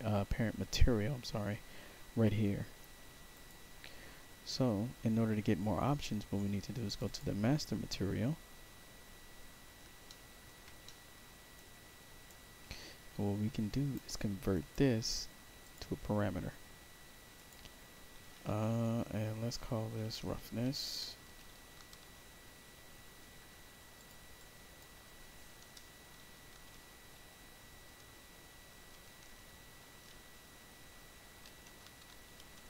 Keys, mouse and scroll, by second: 0.3 middle click, 3.2 click, 6.8 click, 7.0 click, 8.1-8.7 scroll down 1, 8.7 scroll down 1, 10.0 alt+middle click, 10.8 middle click, 11.5 right click, 12.5 middle click, 13.0 middle click, 13.6 right click, 14.4 right click, 15.5 click, 17.3 click, 19.8-22.7 typing, 23.9 click, 24.3 click, 26.4 shift+r, 28.5-29.9 typing, 31.0-32.6 typing.